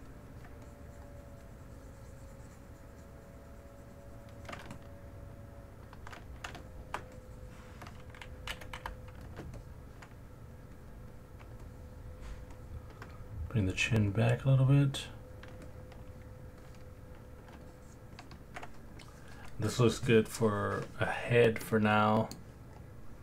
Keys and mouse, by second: 0.6 shift+click, 4.7-5.8 alt+drag, 6.6 middle click, 7.1 shift+click, 8.5 g, 8.8 f, 9.5 middle click, 9.6 alt+click, 10.4 click, 10.8 click, 11.6 alt+middle click, 12.6 alt+middle click, 13.5 click, 14.1-15.4 drag, 15.7 alt+middle click, 16.6 alt+click, 17.7 ctrl+alt+click, 18.2 ctrl+click, 21.6 middle click.